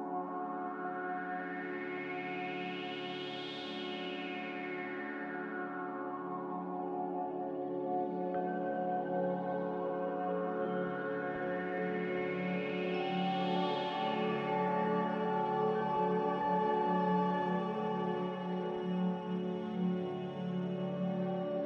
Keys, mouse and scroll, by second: 2.0 z, 2.5 z, 8.4 a, 17.6 z.